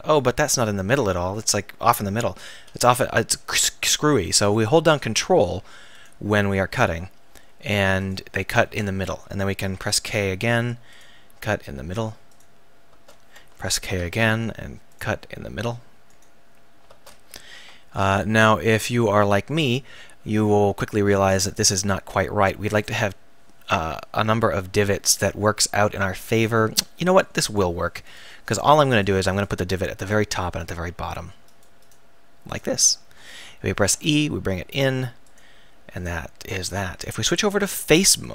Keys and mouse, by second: 2.5 k, 9.7 k, 13.9 k, 27.5-30.4 right drag, 30.4 click, 33.9 e, 35.4-38.3 drag.